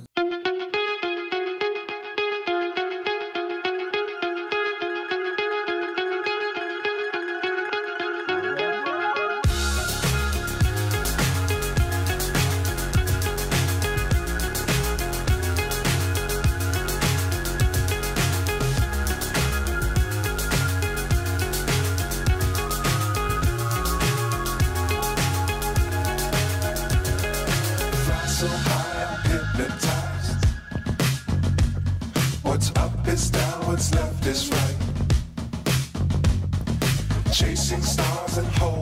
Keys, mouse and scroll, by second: 1.8 shift+a, 3.9 g, 4.7 r, 5.8 g, 6.7 click, 7.2 g, 8.6 click, 9.3 click, 10.3 click, 11.0 click, 12.0 g, 13.0 click, 13.5 g, 14.7 click, 15.4 click, 16.8 click, 17.7 click, 19.3 click, 19.6 s, 24.8 click, 25.9 g, 28.5 shift+d, 33.6 middle click, 33.6 g, 34.4 g.